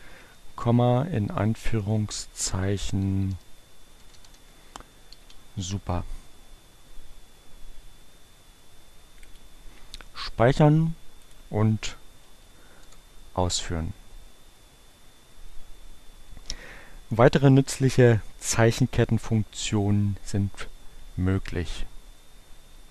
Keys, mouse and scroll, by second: 1.0 shift+2, 2.2-5.2 typing, 8.4-9.8 drag, 11.2 click, 12.0 Up, 12.0 scroll up 1, 12.6 Return.